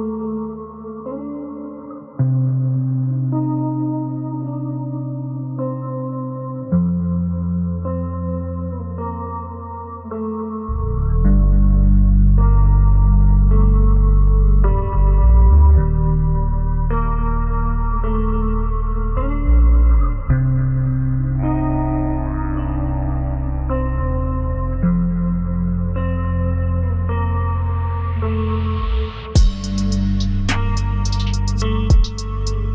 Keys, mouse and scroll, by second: 3.6 double click, 4.7 ctrl+space, 5.0 ctrl+click, 6.4 ctrl+v, 6.7-7.4 scroll down 1, 9.3 typing, 11.1 ctrl+space, 11.5 ctrl+click, 11.9 double click, 13.1 right click, 15.9 double click, 19.9 double click, 20.8 shift+click, 21.2 typing, 22.2 scroll up 1, 23.1 double click, 23.9 scroll down 1, 26.7 scroll up 1, 27.8 double click, 31.0 right click, 31.9 double click, 32.4 scroll down 1.